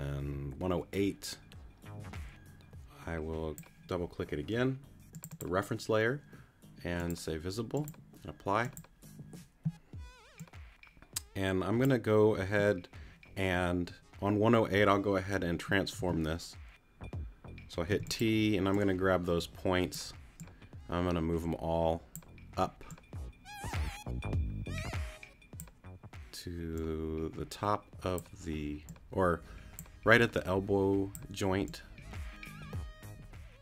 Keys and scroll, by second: 16.0 t, 17.9 t.